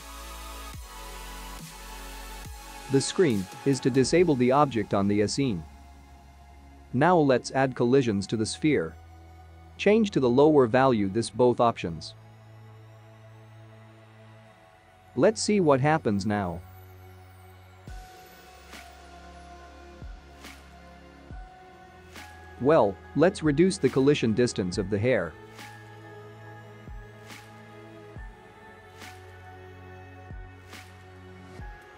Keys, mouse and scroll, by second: 1.2 click, 3.8 click, 4.4 click, 5.5 click, 7.0 click, 8.0 click, 8.6 click, 10.2 click, 11.3 click, 14.3 click, 15.9 ctrl+s, 16.7 KP_0, 19.7 space, 21.0 space, 23.3 space, 23.8 click, 25.0 scroll down 1, 26.3-26.9 scroll down 8, 27.6 click, 28.8-29.3 scroll down 3, 29.6 click, 29.9-30.6 scroll down 4, 31.2 click.